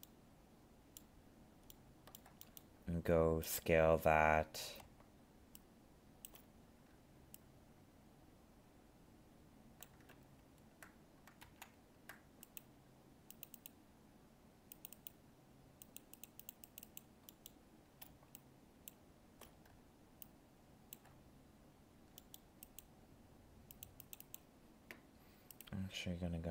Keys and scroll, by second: 10.1 ctrl+z.